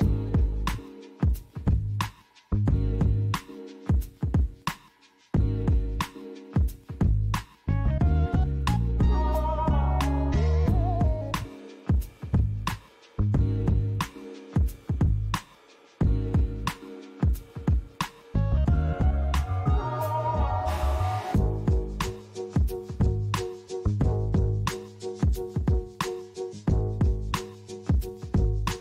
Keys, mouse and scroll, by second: 0.0 g, 0.6 x, 2.0 click, 3.0 click, 7.9 KP_0, 9.5-10.9 scroll up 2, 13.3 click, 17.2 click, 17.9 click, 23.8 click, 25.5 KP_0, 27.7 click.